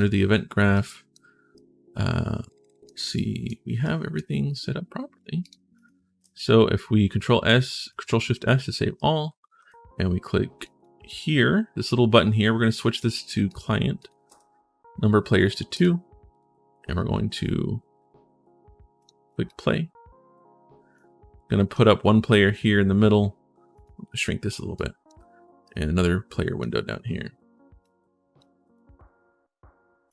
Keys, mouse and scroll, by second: 0.5 right click, 1.3-2.6 right drag, 2.9 right click, 3.6 right click, 5.2 click, 6.0 ctrl+shift+s, 8.7 right click, 9.0 s, 10.4 right click, 10.9 right click, 12.7 click, 13.2 click, 13.8 click, 14.0 2, 18.8 click, 19.2 click, 20.7 click, 23.5 click, 24.5 click, 25.4 click, 25.8 click, 27.6 click, 29.8 right click.